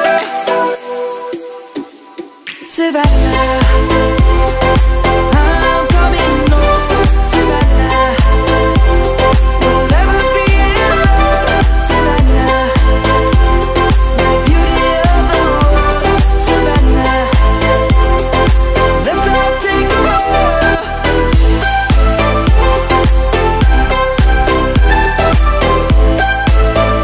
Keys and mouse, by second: 1.1 click, 2.2 alt+z, 3.0 click, 10.5 right click, 10.7 middle click, 15.3 middle click, 17.7 1, 21.4 middle click.